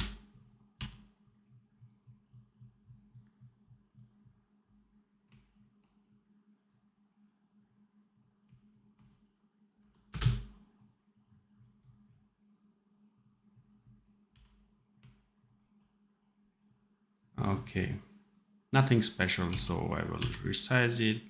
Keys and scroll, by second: 0.6 v, 9.6 Delete, 14.2 n, 19.4 x, 20.1 v.